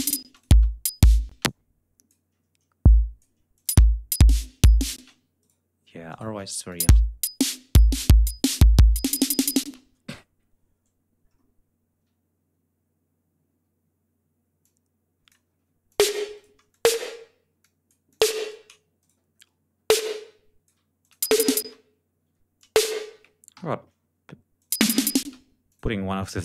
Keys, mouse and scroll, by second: 0.2 space, 0.2 click, 1.2 space, 1.4 click, 2.8 click, 3.4 click, 3.6 space, 4.9 space, 5.3 shift+right click, 6.0 shift+right click, 6.6 shift+click, 6.7 shift+space, 8.3 ctrl+scroll down 2, 9.6 space, 9.6 ctrl+scroll up 2, 11.2 scroll down 2, 12.0 ctrl+scroll up 2, 14.5 click, 15.8 ctrl+click, 16.3 ctrl+shift+right click, 16.6 ctrl+shift+click, 17.5 alt+click, 18.9 ctrl+shift+right click, 19.3 ctrl+shift+scroll up 2, 19.8 ctrl+alt+click, 20.9 alt+click, 21.1 alt+space, 22.2 e, 22.5 click, 23.5 alt+shift+Down, 24.5 click, 24.7 space, 25.6 click, 26.1 click.